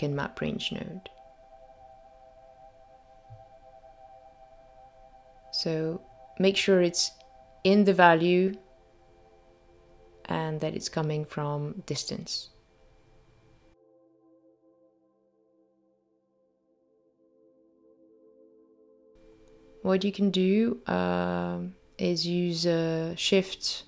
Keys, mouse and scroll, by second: 2.6-3.6 scroll up 4, 3.6 middle click, 3.6 scroll up 2, 8.1 middle click, 9.3 middle click, 11.2 middle click, 18.6 click, 19.1 middle click, 19.8 shift+right click, 21.2 middle click, 22.9 click.